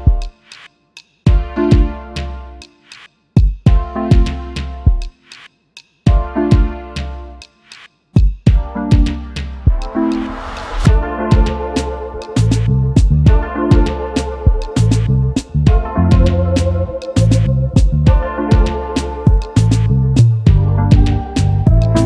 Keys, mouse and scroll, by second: 2.2 alt+scroll up 1, 3.0 space, 3.2 double click, 3.4 space, 7.0 alt+scroll up 1, 7.6 double click, 7.9 space, 8.9 right click, 10.9 alt+shift+click, 13.8-15.2 typing, 15.8 alt+scroll up 1, 17.4-17.8 alt+scroll down 1, 19.6 shift+click, 21.6 alt+scroll down 1.